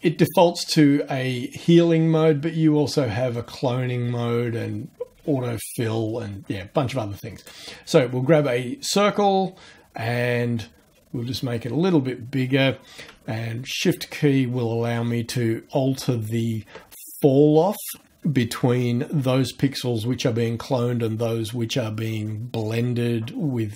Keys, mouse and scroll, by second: 7.3 click, 11.9-12.4 scroll down 3, 13.5-14.4 shift+scroll up 1, 14.5 shift+scroll up 1, 16.0 shift+scroll up 2.